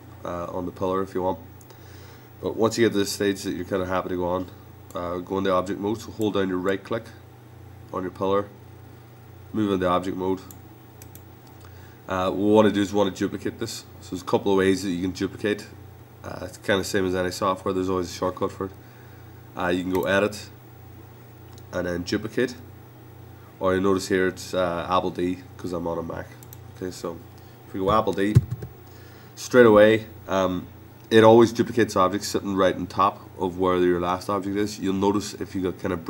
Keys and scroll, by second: 28.3 super+d.